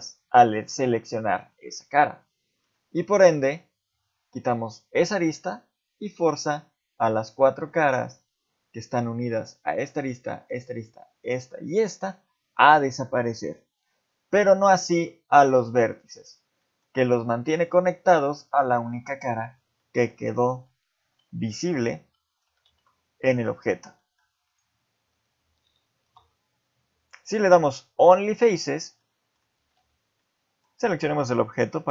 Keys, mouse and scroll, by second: 2.3 middle click, 3.3 middle click, 7.7 middle click, 14.9 ctrl+Tab, 16.0 click, 16.6 middle click, 17.5 shift+click, 18.0 middle click, 19.4 scroll down 1, 19.8 middle click, 20.5 ctrl+z, 21.0 ctrl+z, 21.5 middle click, 22.0 ctrl+z, 22.4 ctrl+z, 22.7 ctrl+z, 23.4 middle click, 24.0 shift+middle click, 24.5 click, 26.0 x, 29.0 middle click, 29.6 a, 29.8 a, 30.2 middle click, 30.9 shift+scroll down 1, 31.0 shift+middle click, 31.8-31.9 scroll down 2.